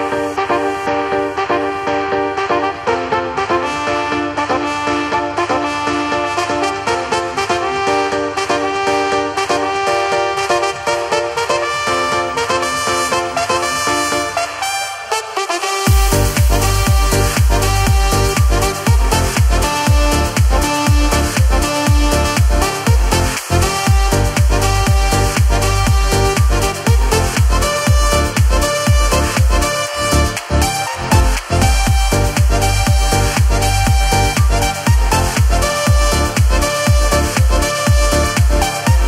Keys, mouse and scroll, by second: 4.2-4.7 scroll down 6, 4.7 shift+middle click, 8.8 middle click, 12.2 scroll up 3, 12.5 shift+middle click, 13.0 scroll up 2, 13.3 shift+middle click, 15.2 shift+middle click, 21.2 click, 29.2 click, 32.0 click, 38.2 click.